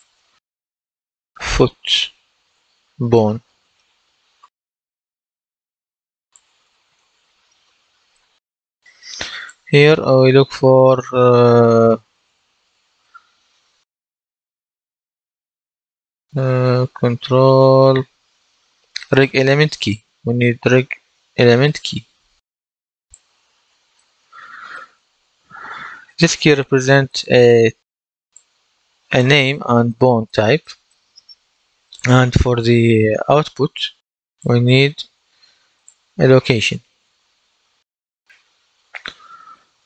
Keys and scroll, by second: 0.8-4.8 typing, 6.9 BackSpace, 8.0 shift+b, 8.4 Return, 11.8-12.6 typing.